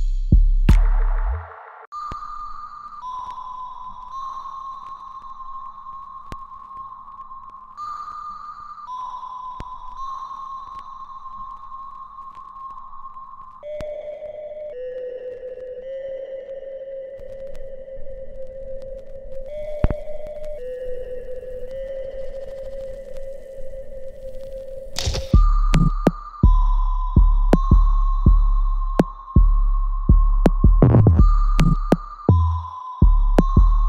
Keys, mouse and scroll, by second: 0.9 click, 7.4 shift+click, 8.3 shift+right click, 8.6 click, 9.3 alt+middle click, 9.8-11.5 alt+right drag, 11.5 alt+click, 13.5 alt+click, 15.2-16.5 alt+drag, 17.3 alt+right click, 17.8 alt+click, 18.2 alt+middle click, 18.5 alt+right click, 19.1 alt+click, 20.8-24.6 alt+drag, 24.6 alt+right click, 26.4 ctrl+b, 27.2 right click, 27.2 alt+right click, 27.9 alt+middle click, 28.5-30.5 alt+right drag, 30.8-31.9 drag, 31.9-33.8 ctrl+drag.